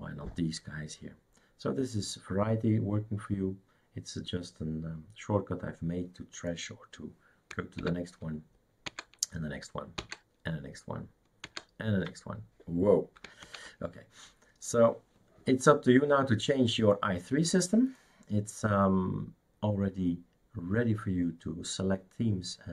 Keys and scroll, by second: 7.8 alt+Right, 8.9 alt+Right, 11.4 alt+Right, 13.4 alt+Right.